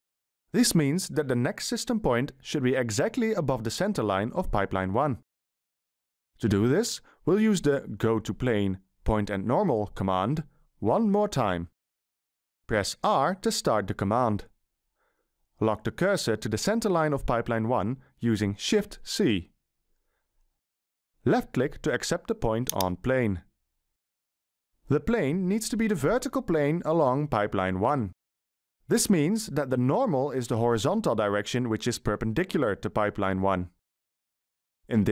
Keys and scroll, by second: 13.6 r, 18.7 shift+c.